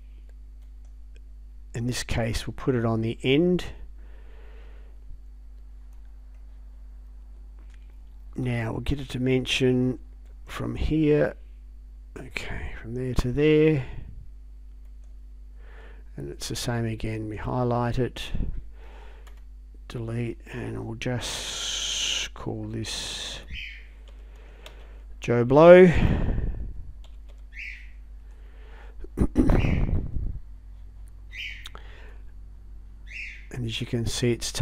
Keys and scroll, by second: 19.3 BackSpace, 23.4-24.8 typing, 26.5-28.2 typing.